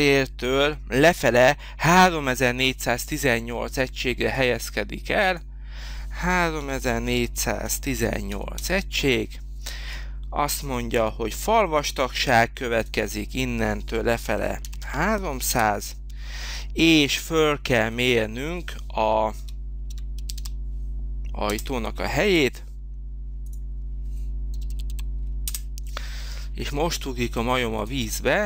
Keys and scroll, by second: 6.3-8.1 typing, 8.6 Return, 14.3 3, 14.7 0, 15.5 Return, 19.1-20.7 typing, 21.5 Return, 24.3-25.2 typing, 25.4 Return.